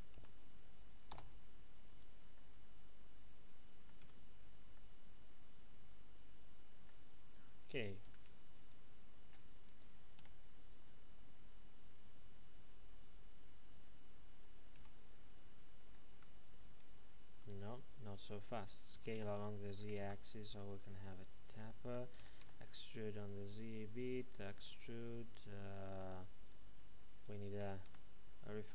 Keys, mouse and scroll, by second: 0.1 alt+m, 1.1 Return, 1.8 Tab, 2.3 middle click, 4.0 z, 4.3-4.7 scroll down 1, 4.7 middle click, 6.9 Tab, 8.0 a, 8.6 alt+shift+right click, 10.1 e, 14.7 x, 16.1 Escape, 16.8 ctrl+z, 18.9 typing, 20.0 KP_Enter, 20.9 middle click, 22.1 typing, 23.8 click, 24.6 middle click, 26.4 right click, 27.1 shift+right click, 27.8 s.